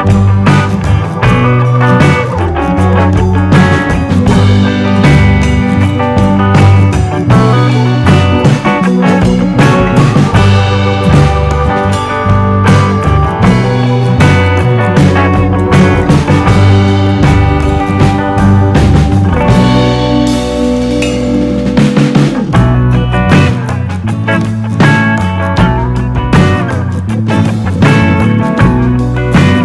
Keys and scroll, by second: 8.5 super+d.